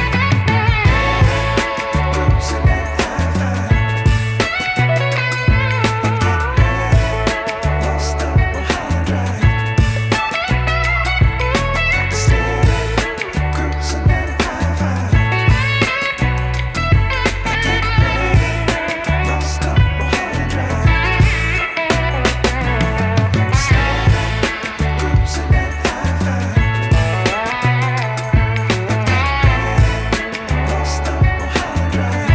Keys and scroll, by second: 3.6-5.9 typing, 19.4-21.6 typing.